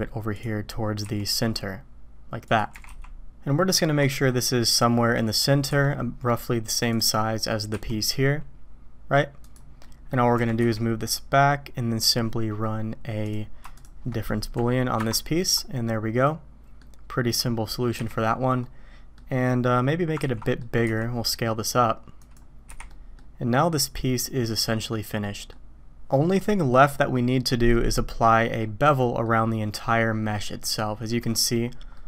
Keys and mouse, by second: 1.0 s, 2.7 g, 7.7 s, 9.8-10.1 drag, 10.3 g, 13.7 shift+click, 15.0 ctrl+KP_Subtract, 15.8-16.8 drag, 18.0 h, 18.6-19.2 drag, 20.2 ctrl+z, 20.4 click, 20.8 s, 22.7 h, 22.9 click, 24.5-24.9 drag, 25.2 drag, 28.2 click, 29.0 click, 30.8-31.1 middle drag, 31.9 drag.